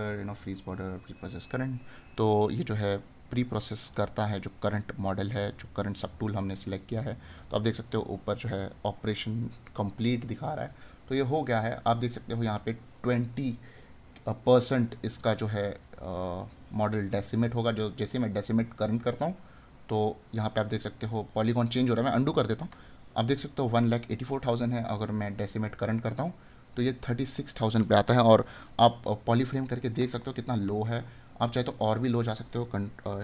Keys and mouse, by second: 12.1 right click, 15.8 right click, 30.5 right click.